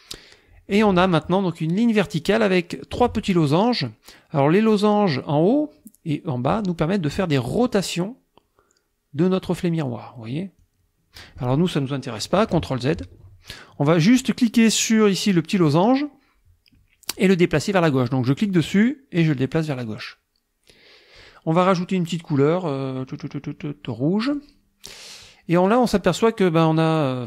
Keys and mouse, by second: 7.6-9.8 drag, 10.6-11.6 drag, 12.6 ctrl+z, 18.5-21.4 drag, 24.3 click.